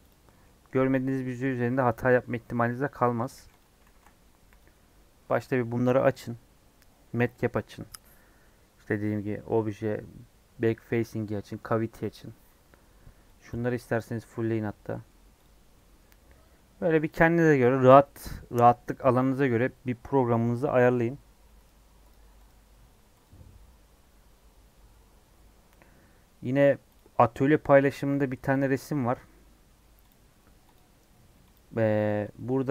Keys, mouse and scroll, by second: 0.0 click, 0.2-3.2 middle drag, 3.2 click, 3.3 x, 4.5 shift+a, 14.8 middle click, 15.1-15.6 scroll up 4, 15.4 click, 15.7 middle click, 16.0-16.5 scroll down 5, 20.5-22.0 middle drag, 22.0-32.7 drag.